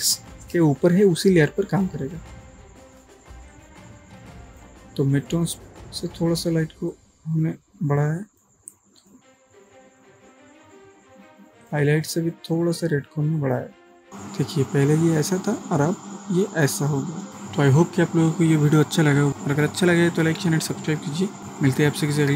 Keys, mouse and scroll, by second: 3.8-4.8 drag, 11.7 click, 16.8-17.3 click, 17.3 ctrl+space.